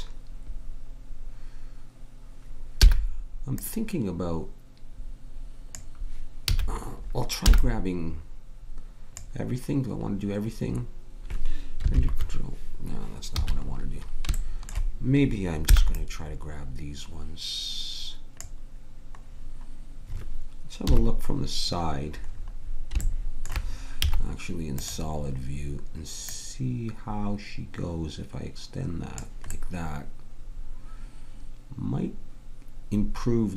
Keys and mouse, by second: 2.8 b, 6.4 a, 7.5 b, 13.3 a, 15.7 b, 20.8 KP_3, 24.0 z, 30.8 click.